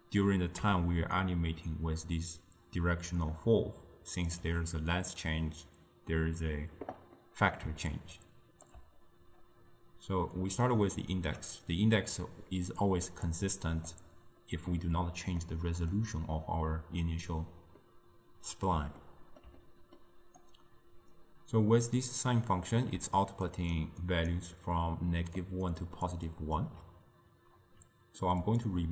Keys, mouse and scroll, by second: 1.3-4.3 shift+drag, 7.3-10.4 middle drag, 10.4-13.5 drag, 13.9-20.5 middle drag, 20.5 click, 23.1-26.8 typing, 23.6 click, 24.1 click, 25.5 drag, 25.9 click, 26.4 click, 28.5 click.